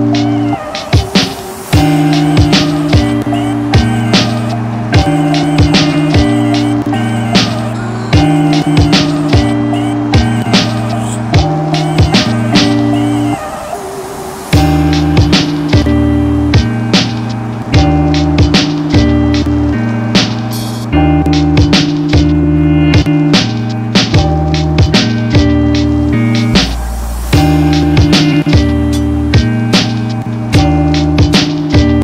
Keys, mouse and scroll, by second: 3.4 click, 4.5-9.2 drag, 11.1 click, 15.4 alt+scroll down 1, 16.0-25.8 drag, 28.3 alt+scroll down 1, 30.1 click, 30.6 alt+click.